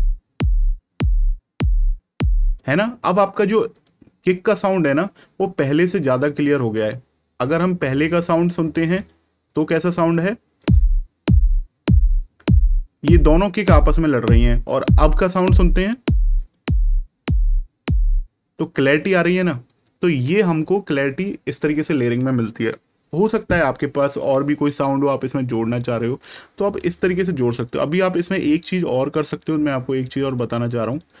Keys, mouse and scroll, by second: 2.4 click, 7.6 click, 15.7 click, 25.7 click, 28.8 click.